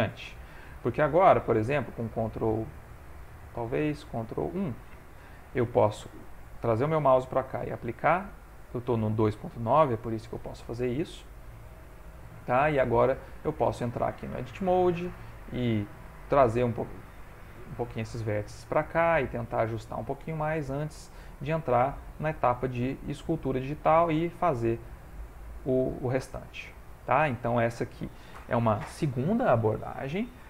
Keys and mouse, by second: 1.8 ctrl+2, 3.2 ctrl+1, 7.6 ctrl+a, 10.3 ctrl+middle click, 11.0 shift+middle click, 11.6 ctrl+middle click, 11.9 ctrl+middle click, 12.0 shift+middle click, 12.5 ctrl+middle click, 12.6 ctrl+middle click, 13.0 middle click, 13.5 shift+middle click, 13.9 shift+middle click, 14.0 middle click, 14.4 Tab, 15.0 click, 15.4 middle click, 16.3 g, 17.5 o, 18.5 g, 20.7 ctrl+middle click, 20.7 middle click, 21.1 Tab, 21.6 middle click, 22.4 ctrl+Tab, 23.7 click, 25.1 click, 25.9 click, 26.4 ctrl+middle click, 26.8 shift+middle click, 27.3 middle click, 29.0 middle click, 29.5 shift+middle click.